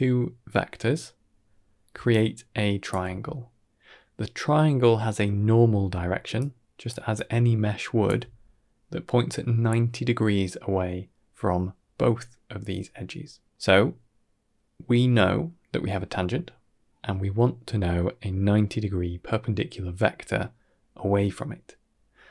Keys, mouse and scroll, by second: 1.8 d, 2.0 click, 2.8 d, 2.8 d, 5.8-8.0 typing, 6.2 click, 7.0 click.